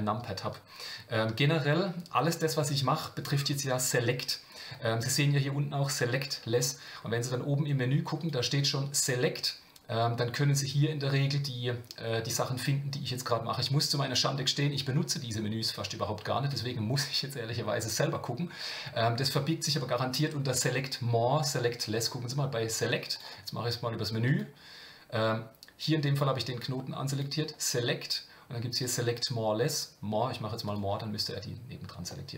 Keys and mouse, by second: 8.2-23.0 drag, 24.3 click, 27.2-30.8 drag, 32.1 middle click.